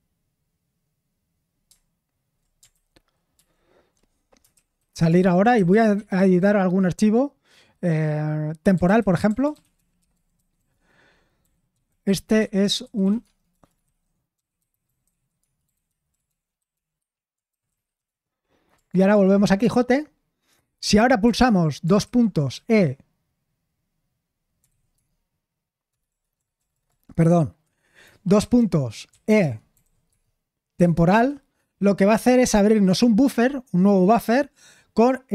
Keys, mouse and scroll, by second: 2.7 ctrl+n, 3.3 ctrl+n, 4.3-6.0 typing, 8.5-23.0 typing, 24.9 typing, 26.0 BackSpace, 26.3 BackSpace, 28.4-30.3 typing, 31.1 Return.